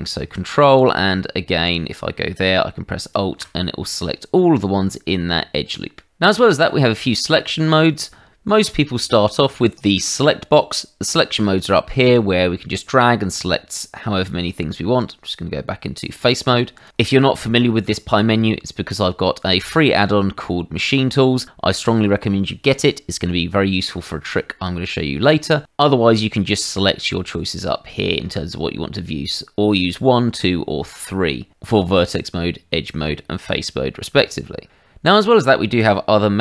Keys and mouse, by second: 0.8 click, 1.6 click, 3.0 alt+click, 12.1 click, 14.7 Tab, 16.7 click, 17.8 Tab.